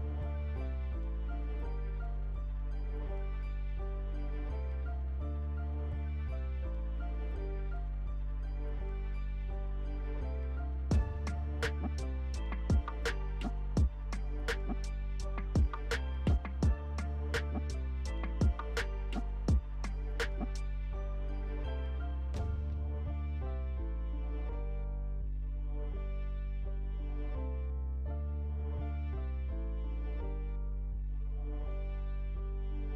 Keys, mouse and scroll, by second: 7.6 alt+Delete, 8.4-17.4 alt+drag, 22.5 alt+F11, 25.2-32.9 alt+drag.